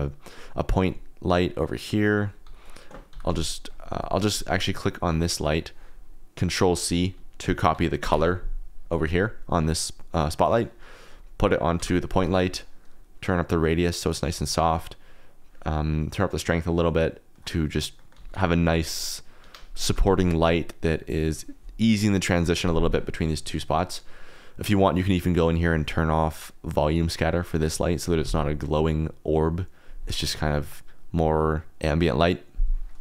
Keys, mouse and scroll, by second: 1.8 click, 2.4 t, 3.0 g, 3.2 z, 3.7 click, 5.0 click, 5.3 click, 8.0 ctrl+c, 10.3 click, 11.7 ctrl+v, 13.3 click, 15.3-17.3 drag, 17.9 drag, 18.3 g, 18.3 y, 19.4 Escape, 19.8 g, 20.0 z, 21.2 click, 25.5 click, 27.2 click.